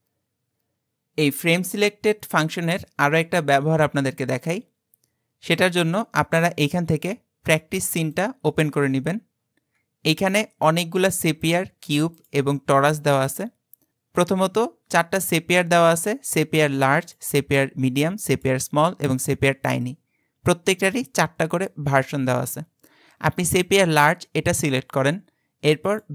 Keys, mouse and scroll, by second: 6.3 click, 8.9-10.0 scroll down 12, 10.3 click, 10.7 scroll down 4, 11.4 click, 12.1 click, 17.0 click, 18.3 click, 19.2 click, 23.6 click, 25.9-26.1 drag.